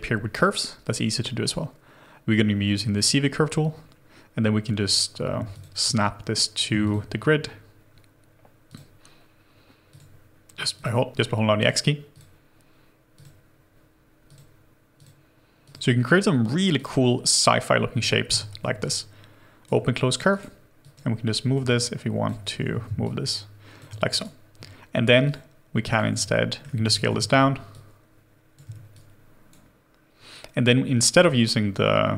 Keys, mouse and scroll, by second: 3.8-5.2 scroll down 1, 16.0 double click, 16.1 x, 18.2 w, 18.8 shift+right click, 20.3 right click, 22.6 ctrl+z, 22.8 x, 24.1 right click, 24.1 x, 26.3 middle click, 26.3 r, 26.8 ctrl+z, 27.0 ctrl+alt+q, 31.2 w.